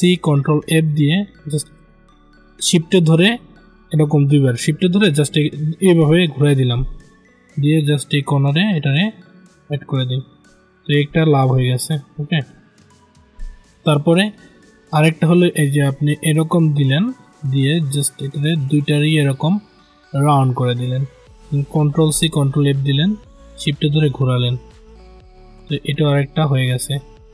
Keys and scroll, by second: 0.5 ctrl+f, 15.8 ctrl+z, 21.6 ctrl+c, 22.0 ctrl+f.